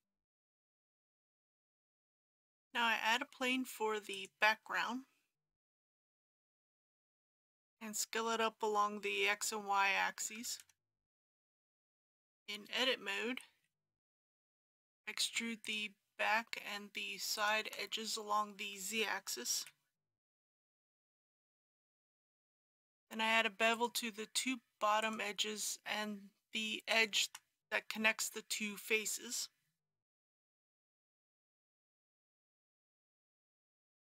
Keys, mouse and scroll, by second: 1.5 alt+a, 2.5 shift+a, 4.2 click, 7.1 s, 10.4 KP_1, 10.7 KP_0, 11.8 middle click, 12.0 Tab, 13.5 2, 15.7 click, 17.4 shift+click, 19.6 e, 20.3 z, 20.9 KP_1, 21.1 KP_0, 23.7 click, 25.0 shift+click, 26.9 shift+click, 30.4 ctrl+b, 33.9 click.